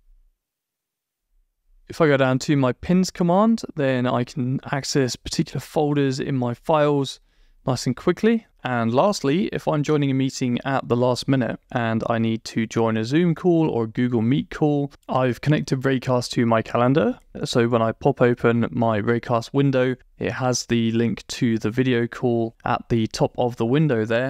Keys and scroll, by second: 0.6 Return.